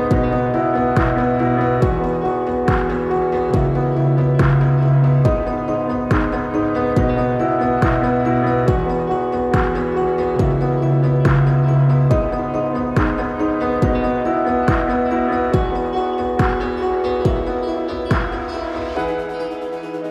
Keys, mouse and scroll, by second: 3.6 click, 3.6 click, 5.0 ctrl+=, 8.2-9.8 drag, 12.3 click, 12.4-16.2 drag, 18.3-18.9 drag.